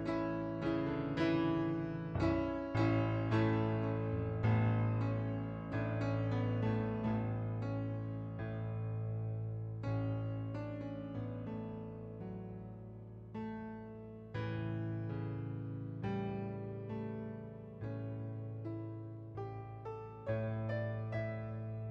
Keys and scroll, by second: 0.6 ctrl+z, 11.6 ctrl+d, 16.1 ctrl+d, 21.2 ctrl+d.